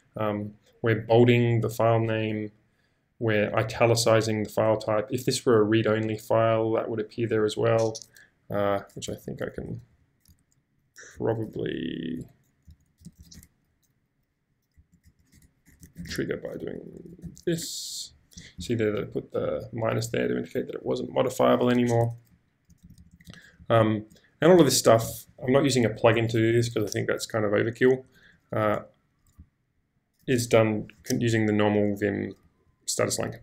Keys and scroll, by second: 9.0-11.1 typing, 12.1-13.6 typing, 14.7-17.8 typing, 15.3 Tab, 22.3-25.5 typing, 26.6 j, 28.0 j, 29.4 k, 29.9 k, 32.4-33.4 typing.